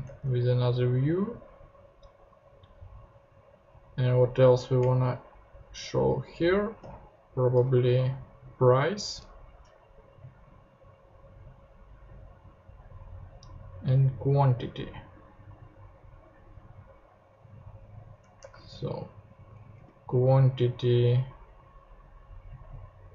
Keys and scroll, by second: 0.0 super+Tab, 0.5 Down, 4.8 Up, 6.8 super+d, 18.4 ctrl+Tab, 19.5 Down, 19.8 super+d.